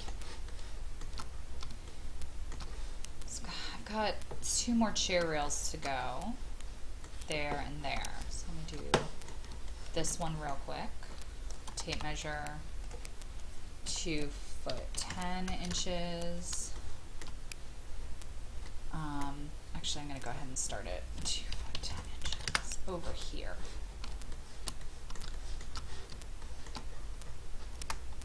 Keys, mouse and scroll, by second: 0.1 shift+scroll down 1, 0.5 shift+middle click, 1.3 scroll up 1, 1.9 shift+middle click, 4.4-5.1 scroll down 1, 5.4-7.8 shift+middle drag, 8.0 shift+middle click, 8.9 middle click, 9.6 shift+middle click, 10.2-11.3 scroll up 2, 10.2 middle click, 11.9 typing, 12.8 click, 13.9 KP_2, 14.9 KP_1, 15.1 KP_0, 15.7 Return, 16.8 shift+middle click, 18.6-20.0 middle drag, 20.2 click, 21.2 KP_2, 21.7 KP_1, 21.9 KP_0, 22.4 Return, 24.3 shift+middle click, 25.3 shift+middle click, 25.7 shift+middle click, 26.0 scroll down 1, 26.9 scroll up 1.